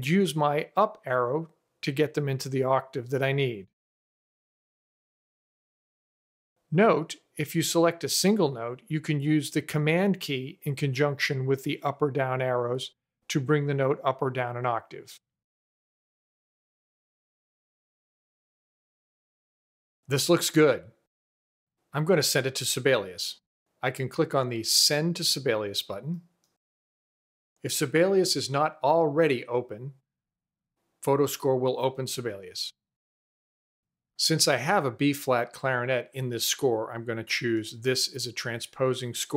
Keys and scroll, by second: 2.1 Up, 4.2 Down, 14.0 super+Down, 15.0 super+Up.